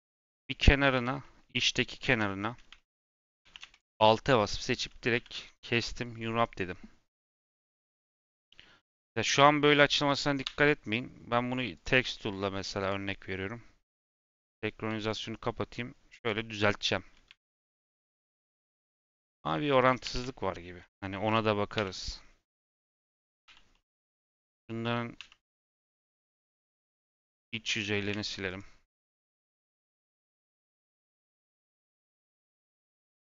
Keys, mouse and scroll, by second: 0.9 /, 1.1 middle click, 2.0 2, 2.3 middle click, 2.9-3.4 scroll up 2, 3.4 2, 3.6 alt+click, 4.3 middle click, 5.1 a, 5.4 u, 11.7 click, 12.7 click, 14.2 click, 15.0 a, 16.1-17.2 drag, 17.2 Tab, 17.5 Tab, 18.4 middle click, 18.9-20.0 scroll down 1, 20.0 2, 20.9 Tab, 21.7 /, 23.4 h, 23.6 middle click, 24.1 click, 25.1 /, 25.4 middle click, 25.7-26.0 scroll down 2, 26.0 middle click, 26.3 3, 27.1 click, 27.6 middle click, 28.4 click, 30.3 click, 30.9 click, 31.5-33.0 drag, 33.0 x.